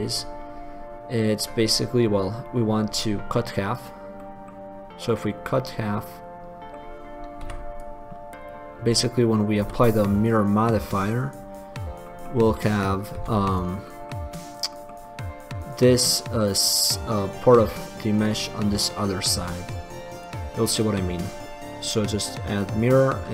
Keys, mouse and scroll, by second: 3.9 click, 4.4-6.9 middle drag, 6.9 click, 7.7 b, 9.8 x, 12.9-15.0 drag, 13.5 x, 20.3-22.9 drag.